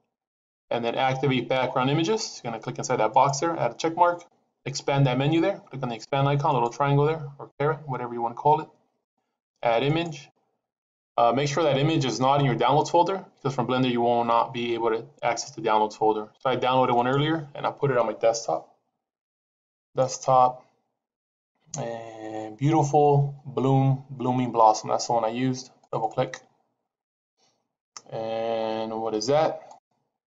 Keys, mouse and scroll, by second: 3.0 click, 6.4 click, 9.7 click, 16.9 click.